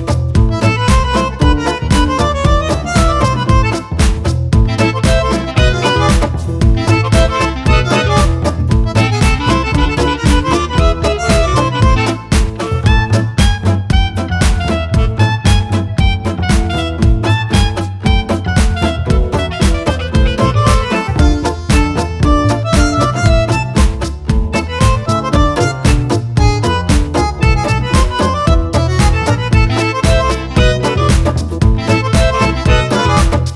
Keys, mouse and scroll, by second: 1.4 ctrl+click, 2.2 ctrl+click, 3.0 KP_Add, 3.8 click, 4.9 click, 9.0 click, 10.4 click, 11.1 click, 11.8 click, 12.6 KP_Subtract, 13.4 click, 15.5-16.2 drag, 16.5-17.4 drag, 18.3 click, 21.6 click, 22.6 KP_Add, 23.4 click, 25.1 click, 27.3 click, 28.1 click, 29.8 click, 31.6 shift+click, 33.4 click.